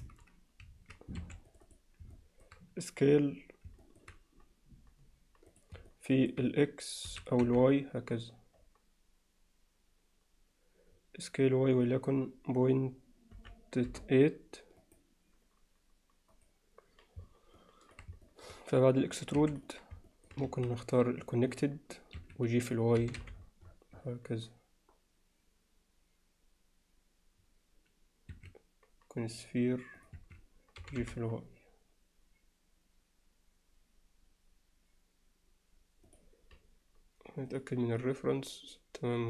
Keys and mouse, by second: 1.2 3, 1.5 click, 2.2 alt+middle click, 3.9 alt+middle click, 5.5 click, 5.9 alt+middle click, 7.1 s, 17.8 alt+click, 18.3 alt+middle click, 19.4 2, 19.5 click, 20.1 middle click, 21.5-22.3 drag, 23.0 g, 29.5-30.3 drag, 30.8 g.